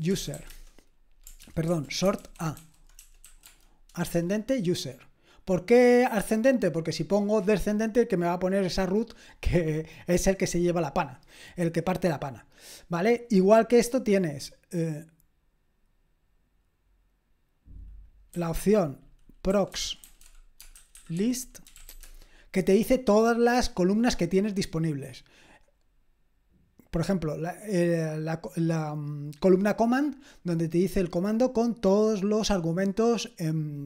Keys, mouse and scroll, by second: 0.0-0.8 typing, 1.4 ctrl+p, 1.7 ctrl+a, 2.6 alt+f, 3.3-4.1 typing, 18.0-19.5 drag, 18.3-22.4 typing, 24.5-27.7 scroll up 1, 27.7 click, 29.6 click.